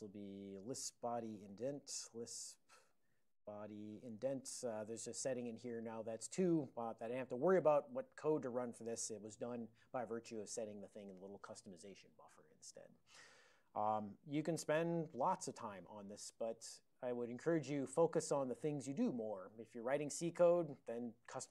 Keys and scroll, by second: 1.3 ctrl+r, 1.3-3.6 typing, 4.3 ctrl+e, 7.7 ctrl+a, 7.9 ctrl+f, 8.0 ctrl+f, 8.9 alt+o.